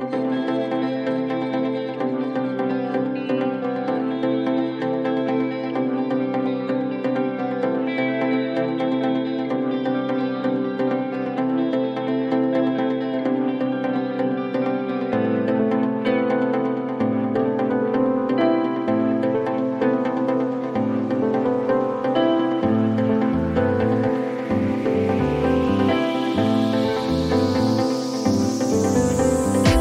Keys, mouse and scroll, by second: 2.8 click, 5.2 click, 5.7 2, 8.6 click, 10.6 right click, 13.0 click, 14.0-15.4 typing, 19.0 click, 22.6 click, 24.0 click, 24.5-26.1 typing, 28.5 click, 28.7 click, 29.3 scroll.